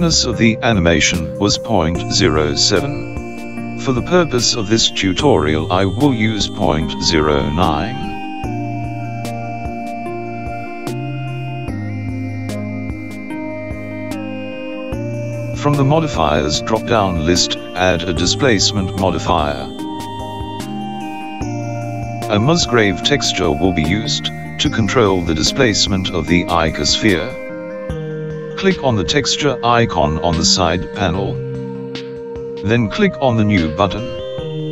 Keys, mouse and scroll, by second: 5.2 click, 16.7 click, 19.2 click, 32.0 click, 33.3 click.